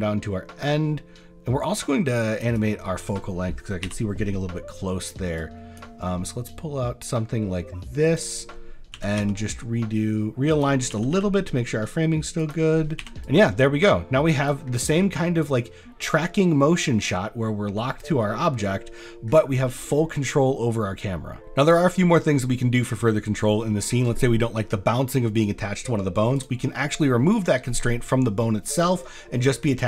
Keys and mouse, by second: 5.0 click, 5.4 click, 6.5-8.2 drag, 8.9 r, 9.2 z, 10.9 r, 11.1 y, 13.0 i, 13.2-14.5 drag, 14.7 space, 19.7 drag, 20.1 drag, 20.7 drag, 21.4 ctrl+z, 22.0 drag, 22.6 shift+click, 22.9 click, 23.4 drag, 23.8 shift+click, 27.3 click.